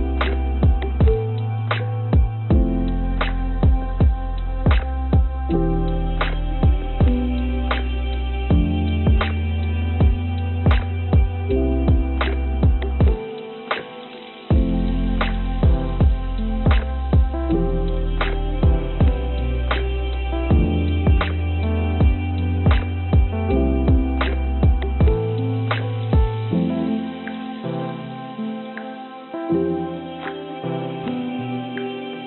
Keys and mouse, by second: 0.5 click, 0.6 click, 2.0 shift+click, 3.0 shift+click, 3.3-4.5 shift+drag, 5.3 shift+d, 8.5 click, 10.1 s, 11.4 g, 14.9 g, 19.5 g, 22.6 click, 22.8-26.1 drag, 26.9 click, 27.8 l, 29.0 shift+d, 31.8 click.